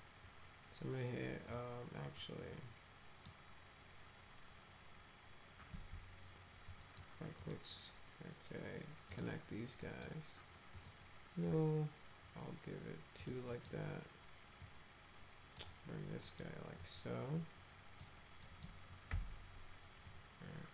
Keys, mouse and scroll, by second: 1.5 click, 2.2-3.3 middle drag, 6.7 click, 7.4 right click, 9.1 click, 9.8 middle click, 10.8 right click, 13.2 click, 13.5 middle click, 14.6 click, 16.2 middle click, 16.8-18.0 drag, 18.4 middle click, 19.1 1, 20.0-20.7 drag.